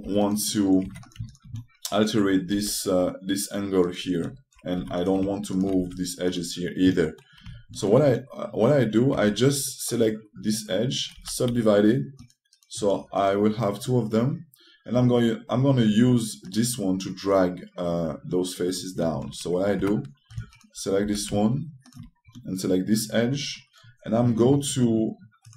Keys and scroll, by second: 0.7 2, 5.5 3, 9.8 2, 11.9 e, 20.5 1, 23.0 typing.